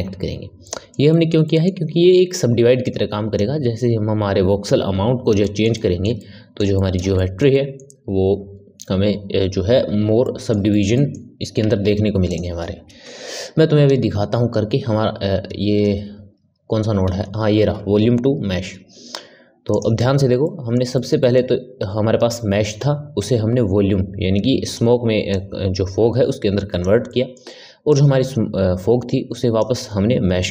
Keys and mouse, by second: 0.6-2.8 middle drag, 2.8-5.4 drag, 5.4-11.6 shift+middle drag, 11.6 shift+a, 20.4-23.2 middle drag, 23.2 click, 25.2 click, 27.0 middle click, 27.8 click.